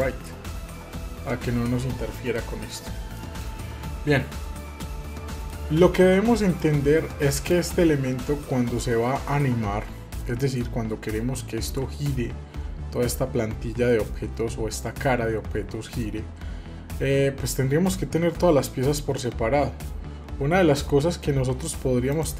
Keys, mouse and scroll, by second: 0.0 click, 2.3-3.4 middle drag, 4.5 middle click, 6.6 click.